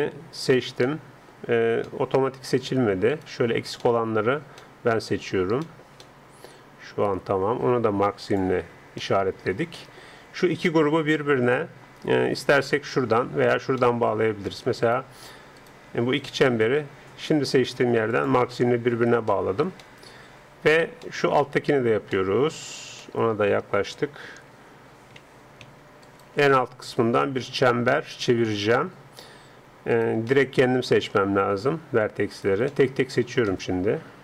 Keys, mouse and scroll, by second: 0.5-1.9 alt+right drag, 0.9 alt+click, 3.1 click, 4.1 middle click, 4.3 click, 4.6-7.9 middle drag, 8.3-10.2 drag, 9.0-12.5 middle drag, 13.8 middle click, 14.8-17.3 right drag, 18.1-20.0 drag, 19.3 middle click, 20.0-23.9 middle drag, 23.9 a, 24.2 a, 24.5 a, 25.7 scroll, 26.1-27.9 right drag, 26.5 middle click, 27.5 alt+middle click, 29.9 right click, 30.3-34.2 middle drag.